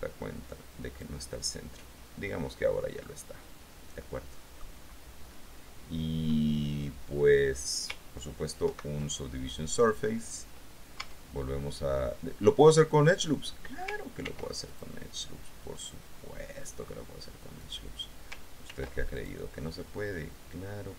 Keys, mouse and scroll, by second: 3.2-5.0 middle drag, 5.7 scroll up 2, 8.8 ctrl+2, 11.2 Tab, 14.4 ctrl+r, 14.9 ctrl+click, 17.8 click, 18.9 ctrl+r, 19.3 ctrl+click.